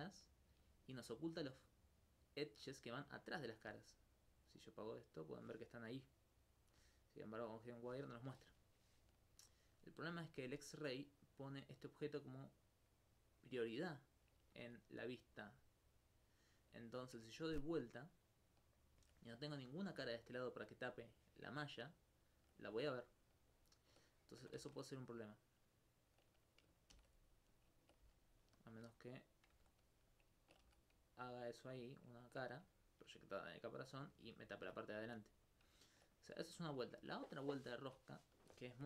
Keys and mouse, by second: 0.3-1.6 alt+drag, 9.3 alt+click, 19.8 alt+click, 20.1 alt+click, 22.0 alt+click, 23.6 alt+click, 23.9 alt+click, 24.6 ctrl+Tab, 25.2 click, 26.2 right click, 26.9 shift+d, 27.5 click, 28.0 ctrl+s, 28.6 click, 28.7 Tab, 29.5 Tab, 30.1 alt+click, 30.3 alt+c, 31.5 alt+c, 32.7 alt+click, 33.0 alt+click, 34.5 alt+click, 34.9 right click, 35.1 x, 35.5 click.